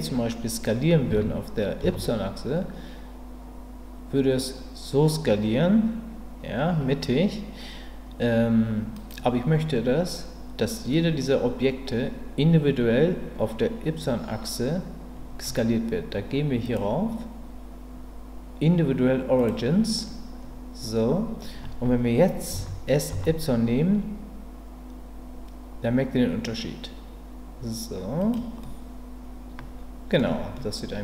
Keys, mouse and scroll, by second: 1.1 s, 1.8 y, 16.7-19.5 drag, 22.5 s, 23.1 y, 28.2 click, 28.6-30.2 middle drag, 30.5-31.0 middle drag.